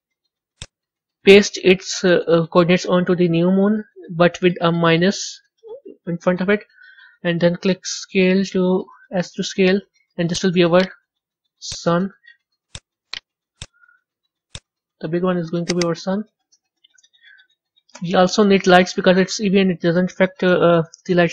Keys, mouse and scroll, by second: 0.4-3.4 drag, 7.9 s, 10.7-12.6 right drag, 12.6 click, 13.0-14.4 right drag, 14.4 click, 15.6 click, 15.7-18.7 drag.